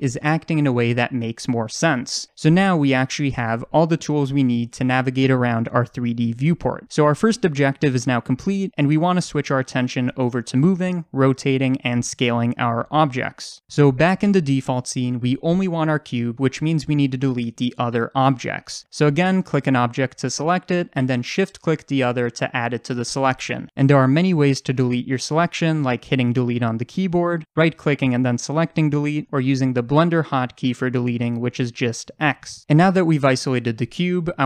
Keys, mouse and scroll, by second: 0.0-0.8 scroll down 2, 0.8 click, 1.1-3.3 middle drag, 3.3 click, 3.8-6.2 middle drag, 6.2 click, 6.6-12.7 middle drag, 8.3-9.2 scroll up 2, 10.1-12.2 scroll down 2, 12.2-12.6 scroll down 1, 19.3 click, 21.3 shift+click, 26.2 Delete, 27.0 ctrl+z, 27.6-33.3 right drag, 30.1 ctrl+z, 32.0 x, 33.3 click.